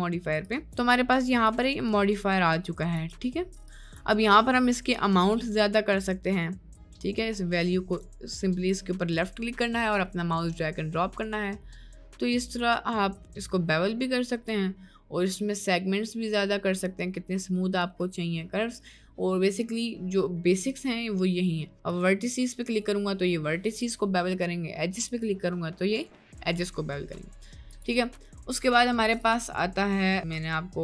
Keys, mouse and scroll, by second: 0.5 click, 1.5-1.9 drag, 2.6-3.0 drag, 3.7 click, 5.2-8.1 drag, 8.8-14.5 drag, 15.5-17.8 drag, 21.9 click, 23.9 click, 25.1 click, 27.7 click, 28.5-30.8 drag.